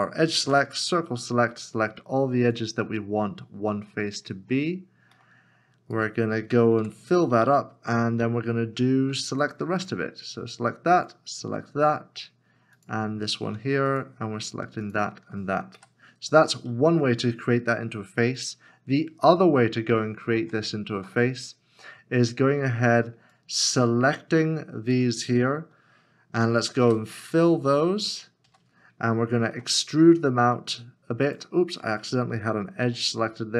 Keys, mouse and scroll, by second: 0.4 c, 5.2 middle click, 6.0 right click, 8.7 f, 9.8 alt+click, 11.0 alt+shift+click, 13.9 shift+click, 14.8 shift+click, 15.8 f, 16.3-18.3 scroll down 1, 21.0 Tab, 22.8 Tab, 24.7 c, 26.8 c, 28.1 right click, 29.5 e, 32.4 e, 32.8 ctrl+z.